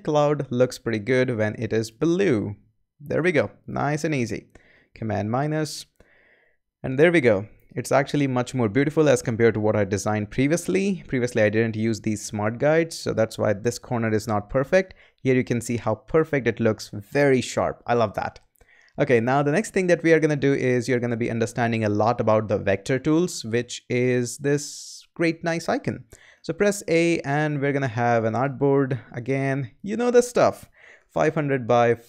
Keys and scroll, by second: 4.7 super+-, 26.3 a, 30.5-32.0 typing.